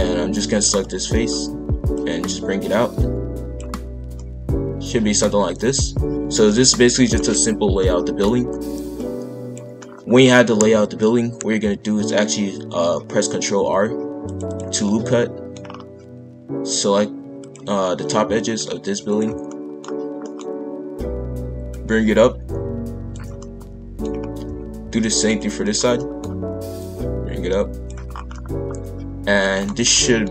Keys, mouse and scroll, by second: 1.9 click, 4.1-8.9 middle drag, 8.9 click, 9.7 scroll up 1, 9.8 middle click, 10.3 scroll down 1, 10.6 KP_5, 10.6 KP_1, 13.6 ctrl+r, 14.8 middle click, 15.6 scroll up 4, 17.4 click, 17.7-19.1 scroll down 1, 19.1 ctrl+click, 19.5 middle click, 19.8-20.2 scroll down 2, 20.2-21.7 middle drag, 21.7 click, 23.4 middle click, 24.1-24.6 scroll up 2, 24.6 ctrl+r, 25.6 click, 25.9 middle click, 26.2-26.8 scroll up 1, 26.8 click, 28.1 scroll down 1, 28.2 scroll up 1, 28.3-30.3 middle drag.